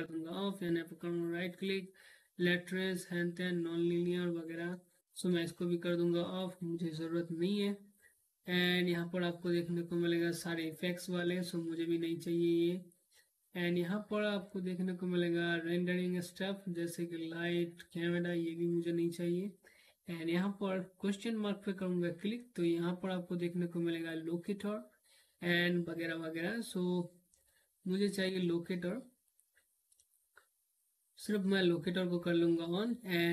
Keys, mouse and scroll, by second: 4.2 click, 8.2 right click, 10.6 click, 14.0 right click, 17.6 click, 21.4 right click, 27.8 click, 28.8 right click, 30.6 click.